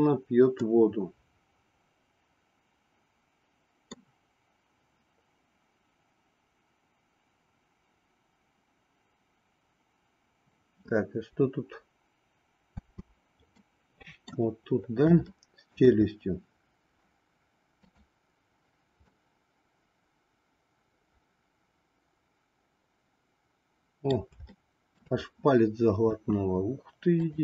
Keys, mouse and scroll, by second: 0.6-4.0 middle drag, 12.8 space, 13.7 middle click, 15.3 shift+middle click, 17.8 click, 19.0-24.3 middle drag, 24.5 shift+middle click.